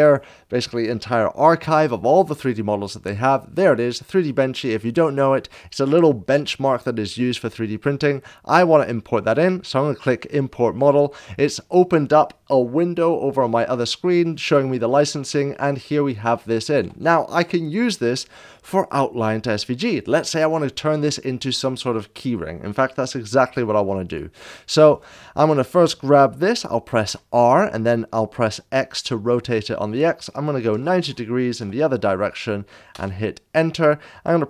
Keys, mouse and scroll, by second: 9.2 click, 10.8 drag, 14.2-14.7 scroll down 1, 15.5-16.1 middle drag, 16.3-16.8 shift+middle drag, 24.7 click, 27.0 r, 28.5 x, 30.5 r, 30.5 x, 30.5 9, 30.7 9, 32.9 Return.